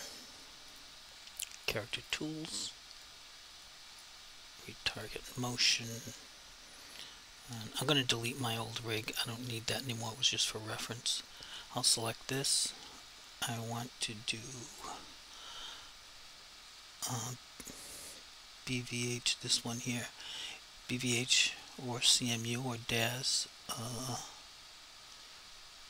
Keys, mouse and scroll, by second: 0.7 click, 5.0 click, 8.4 click, 9.7 Delete, 10.8 click, 14.8 click, 19.0 click.